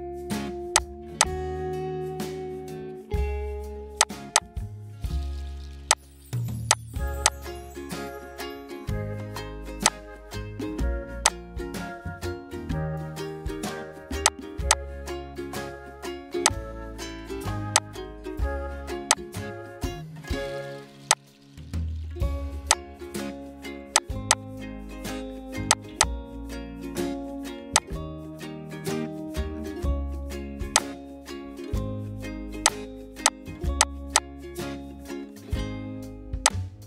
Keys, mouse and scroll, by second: 26.9 ctrl+right click.